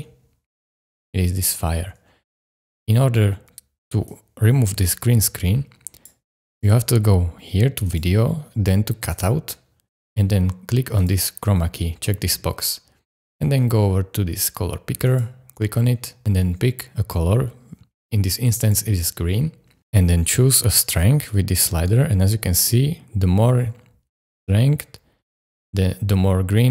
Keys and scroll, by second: 2.4 space.